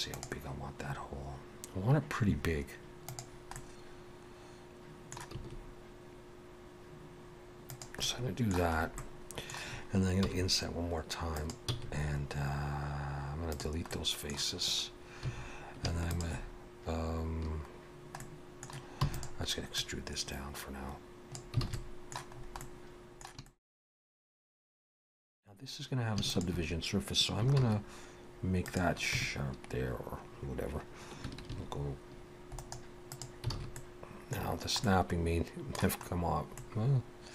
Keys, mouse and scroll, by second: 3.6 middle click, 5.4 s, 8.0 middle click, 8.8-9.5 scroll up 2, 9.0 middle click, 10.2 i, 11.7 x, 13.9 middle click, 15.2 2, 16.1 alt+shift+click, 17.7-18.2 scroll down 1, 18.2 middle click, 19.0 e, 19.8 click, 21.6 alt+a, 21.7 middle click, 22.4-22.7 scroll up 2, 22.6 middle click, 23.5 shift+middle click, 23.8 middle click, 26.3 alt+shift+click, 27.6 shift+e, 29.1 Tab, 31.5 ctrl+2, 32.6 right click, 33.5 alt+a, 33.8 middle click, 34.5 scroll down 2, 34.8 middle click, 36.6 middle click.